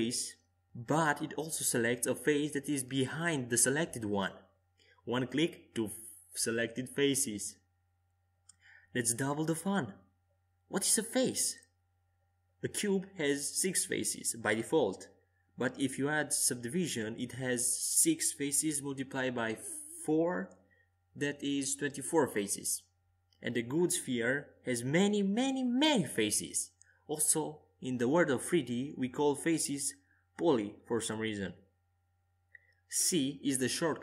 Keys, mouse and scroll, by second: 0.0-1.4 right drag, 0.5 s, 10.8 Tab, 13.2-15.5 drag, 15.3 w, 17.3 u, 20.0 Tab, 20.6 a, 21.0 a, 21.9 u, 24.4 w, 27.1-31.4 middle drag, 28.2 Tab, 32.3 w, 33.6 Tab.